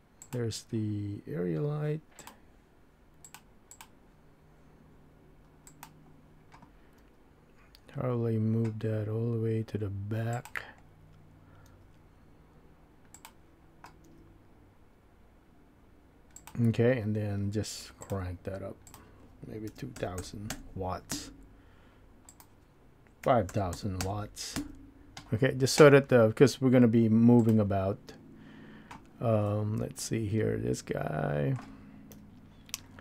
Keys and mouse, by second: 0.2 click, 2.2-3.3 drag, 3.7 click, 5.7 click, 7.0 g, 11.7 g, 14.0 g, 18.9-25.3 drag, 20.2 KP_0, 23.7 KP_0.